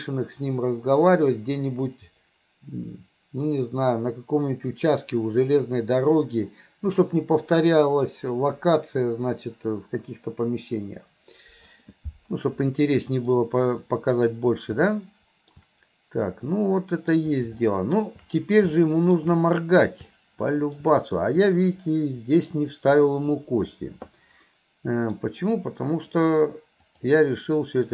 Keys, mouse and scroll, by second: 13.4-14.3 middle drag, 14.9-15.6 middle drag, 16.6-18.0 middle drag, 18.8-19.2 middle drag, 20.2-20.9 middle drag, 21.6-22.6 middle drag, 24.5 middle click, 26.9-27.9 drag.